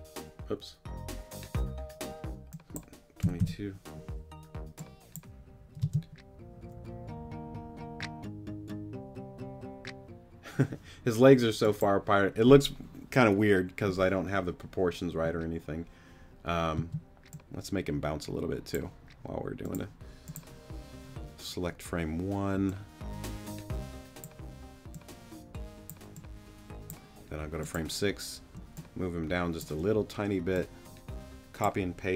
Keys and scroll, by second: 3.2 2, 5.8 space, 16.8 space.